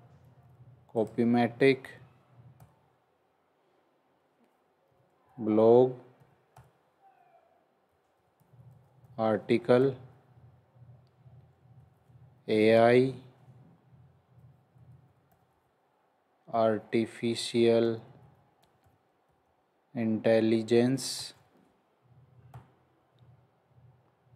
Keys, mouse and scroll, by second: 0.4 ctrl+c, 1.6 ctrl+v, 2.5 /, 4.8-9.4 typing, 11.5-12.4 typing, 14.5-19.2 typing, 20.3-22.4 typing, 24.0 scroll down 1.